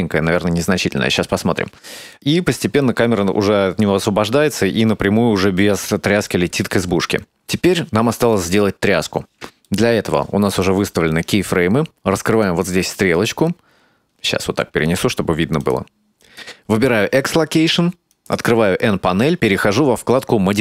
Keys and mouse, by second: 1.9 click, 2.0 space, 4.8 space, 5.4-8.4 drag, 8.9 right click, 11.0 ctrl+middle click, 12.8 click, 14.6-16.1 drag, 16.4 click, 18.1 click, 20.2 click.